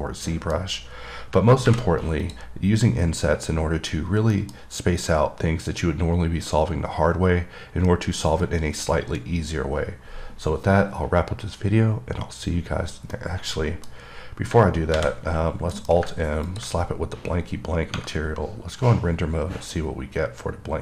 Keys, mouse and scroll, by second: 0.3 middle click, 2.5 click, 4.6 middle click, 4.8 scroll up 2, 9.6-11.7 scroll down 1, 13.4 middle click, 14.2 scroll, 16.7 click, 17.1-17.8 scroll up 6, 19.1-19.8 scroll up 2, 19.8-20.7 scroll up 2, 20.7-20.8 scroll up 2.